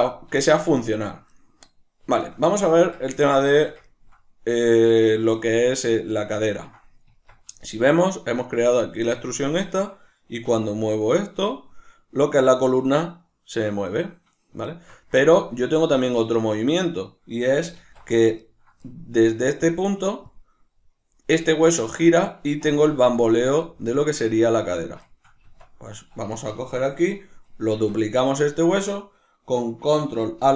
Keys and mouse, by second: 0.5 shift+middle click, 2.2-3.2 shift+middle drag, 3.2 right click, 3.5-9.6 shift+middle drag, 7.1 Tab, 9.6 right click, 10.4 r, 14.4 right click, 14.7-19.7 shift+middle drag, 17.8 alt+q, 19.7-24.3 drag, 25.1-26.3 shift+middle drag, 25.5 Tab, 26.3 right click, 27.7 shift+d, 28.4 right click.